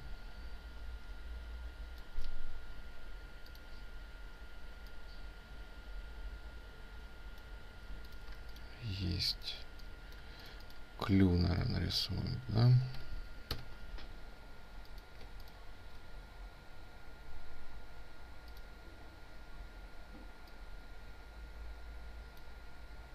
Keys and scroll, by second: 8.1 ctrl+space, 15.0 ctrl+space.